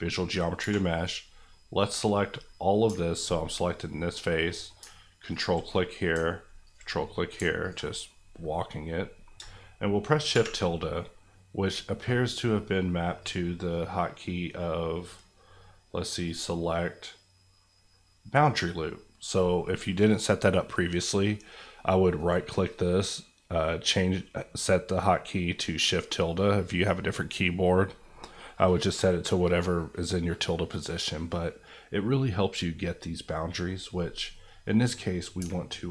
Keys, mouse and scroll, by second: 0.0 middle click, 0.6 3, 0.9 click, 1.5 middle click, 5.3 ctrl+click, 5.7 middle click, 6.6 ctrl+click, 7.0 middle click, 7.6 ctrl+click, 8.0 middle click, 10.3 shift+`, 11.0 middle click, 13.2 click, 22.1 right click, 32.5-34.6 middle drag.